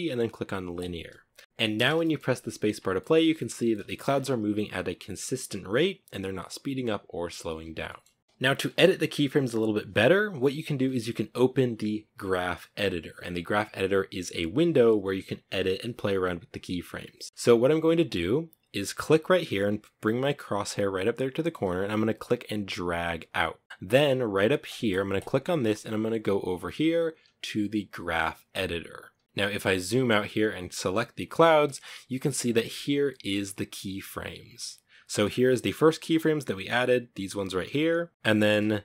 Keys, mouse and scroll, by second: 0.0 t, 1.0 space, 1.4 shift+middle click, 1.9 scroll down 1, 2.2-3.2 middle drag, 3.2 scroll up 6, 3.7 scroll down 1, 7.2-7.8 shift+middle drag, 7.8-8.3 scroll down 1, 20.8-23.7 drag, 23.9 click, 24.4-27.5 drag, 29.3 scroll down 10, 30.1 right click, 31.0 middle click, 31.8-32.3 scroll down 1, 32.3-35.7 ctrl+middle drag, 35.7-38.1 drag, 38.1 scroll up 7, 38.7-38.8 drag.